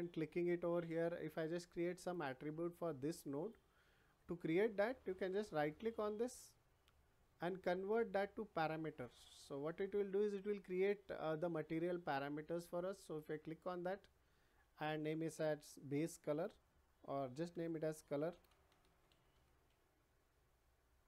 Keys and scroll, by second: 16.2 shift+b, 17.5-19.0 typing.